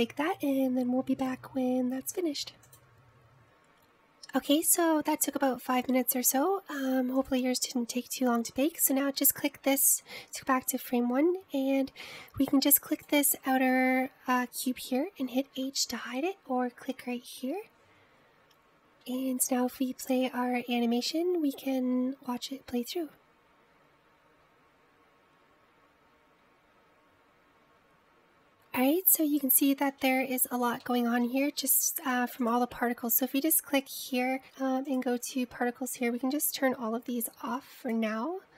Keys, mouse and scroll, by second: 6.2-8.3 middle drag, 8.3-13.9 drag, 14.0 click, 14.9-16.7 scroll up 2, 16.7 h, 20.2 space, 21.3-23.4 middle drag, 27.4 middle click, 29.5 scroll up 2, 30.3-31.2 shift+middle drag, 31.2-31.9 scroll down 1, 31.9-33.5 middle drag, 33.5 click, 36.0 drag, 38.2-38.5 drag.